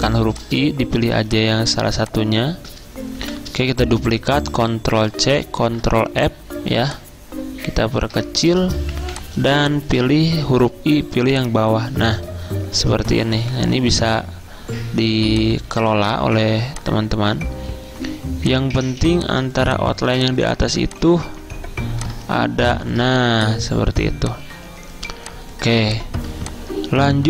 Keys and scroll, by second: 0.1 i, 1.1 z, 3.0-3.8 typing, 5.0 ctrl+c, 5.7 ctrl+f, 8.8-11.0 typing, 13.5 g, 19.0 z, 20.8 v, 24.0 z.